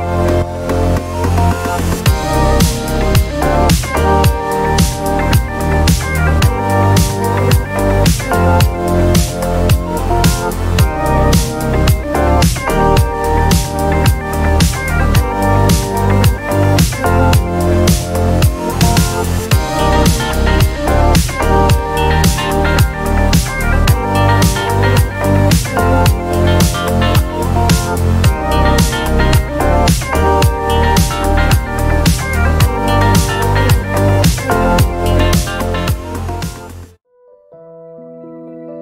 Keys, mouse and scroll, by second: 0.3 space, 1.7 click, 2.4 click, 3.4-6.2 drag, 7.9 space, 9.0 ctrl+scroll down 2, 9.7-10.4 ctrl+scroll down 4, 11.9 ctrl+d, 13.2-15.1 drag, 16.2-17.9 ctrl+drag, 18.0 ctrl+space, 19.5 ctrl+d, 20.1-23.8 ctrl+drag, 24.6 ctrl+d, 25.3-27.6 ctrl+drag, 28.2 click, 29.5 ctrl+d, 30.9 click, 31.5 shift+click, 32.1 shift+click, 32.7 shift+click, 33.8 ctrl+KP_Add, 35.2 shift+click, 36.5 ctrl+KP_Multiply.